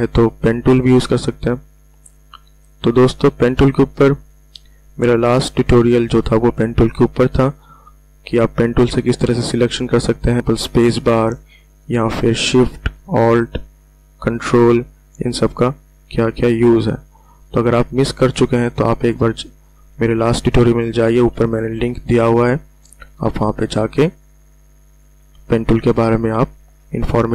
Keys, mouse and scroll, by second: 4.1 ctrl+alt+scroll up 1, 5.6 space, 5.7 click, 6.4 ctrl+alt+scroll up 1, 7.9-9.5 drag, 9.5 ctrl+alt+scroll down 1, 10.4 space, 10.6-18.9 alt+drag, 20.1-20.4 ctrl+alt+scroll up 2, 21.4 ctrl+alt+scroll down 1, 22.2 ctrl+alt+scroll down 1, 23.4-25.4 alt+drag, 25.4 ctrl+alt+scroll up 1.